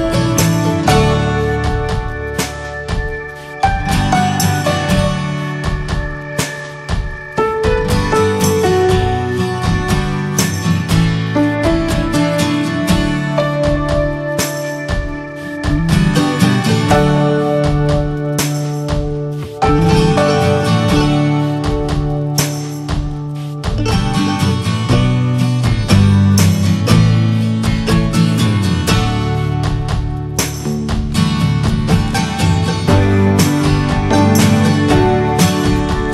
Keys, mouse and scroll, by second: 0.0 right click, 0.2 a, 0.7 right click, 1.2 scroll down 3, 1.4-2.7 middle drag, 2.7 click, 2.9 shift+middle click, 3.5 Tab, 3.6-4.0 drag, 4.0-6.1 shift+middle drag, 6.1 click, 6.6 Tab, 7.2 scroll down 1, 7.4-11.2 middle drag, 11.2 Tab, 11.4 click, 11.6 ctrl+a, 12.2 Tab, 13.1 s, 15.1 middle click, 15.3-16.3 scroll up 2, 15.6 middle click, 16.3 middle click, 17.1 s, 19.7 click, 19.9 scroll down 1, 21.1 click, 21.6 ctrl+j, 22.5 ctrl+a, 23.0 click, 23.3 middle click, 23.6 ctrl+s, 24.0 shift+middle click, 24.1 shift+scroll up 1, 24.2 scroll down 2, 24.5 middle click, 24.6 ctrl+scroll up 1, 24.7 ctrl+s, 25.0 click, 25.2 scroll up 2, 25.7-29.1 middle drag, 29.1-29.5 drag, 29.5 middle click, 29.8 Tab, 30.5 scroll down 3, 30.9 a, 32.8-34.3 drag, 34.3 Tab, 36.0 right click.